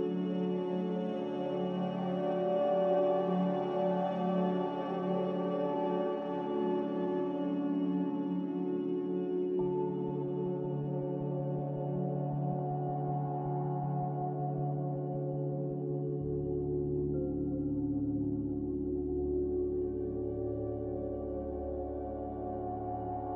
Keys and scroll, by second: 1.5 typing, 3.2-4.4 typing, 4.0 Return, 7.2 typing, 8.3-9.1 typing, 10.6 z, 17.0 x, 19.6 z, 22.2 typing, 22.4 Return.